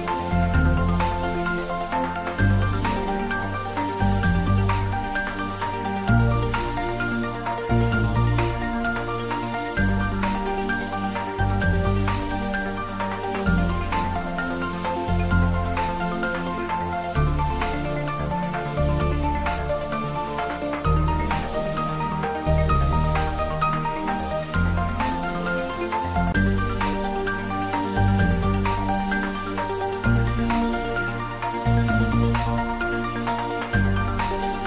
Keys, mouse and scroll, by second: 5.1 alt+shift+click, 6.7 scroll up 1, 7.6-8.6 scroll down 1, 8.6-11.0 scroll up 1, 11.0 click, 11.6 alt+shift+click, 15.4 scroll down 1, 16.0 Tab, 16.6-18.2 scroll up 1, 19.4 scroll up 1, 20.0 middle click, 20.5-21.8 scroll up 1, 21.8 click, 25.1 click, 33.0-34.2 scroll up 1.